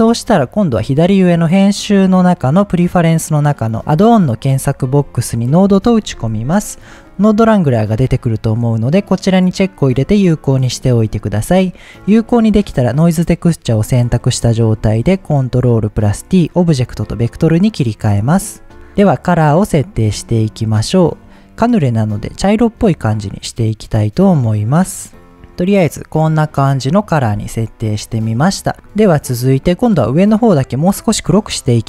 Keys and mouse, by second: 12.1 click, 13.7 middle click, 14.8 ctrl+t, 15.4 middle click, 16.4-17.1 drag, 18.1 middle click, 21.9-22.2 drag, 25.0 click, 25.3-26.9 right drag, 28.3 middle click.